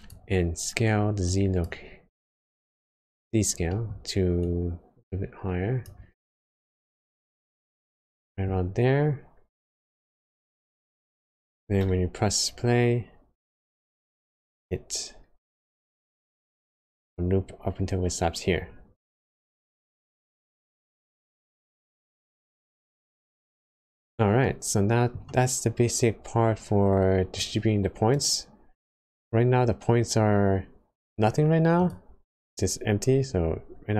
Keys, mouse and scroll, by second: 2.1-2.6 scroll up 3, 2.6 middle click, 3.1-3.6 scroll up 3, 3.6 middle click, 4.3 click, 6.3-6.8 scroll down 4, 7.1 middle click, 8.7 scroll up 1, 9.6 scroll up 1, 10.0 scroll down 1, 10.1 middle click, 10.1 scroll up 1, 11.8 space, 13.5 middle click, 14.3 scroll up 1, 15.4 scroll down 1, 16.7 middle click, 19.2 space, 19.4 scroll up 1, 20.4-22.1 scroll down 11, 24.3 middle click, 25.3 scroll up 1, 27.4 click, 31.7-33.9 click.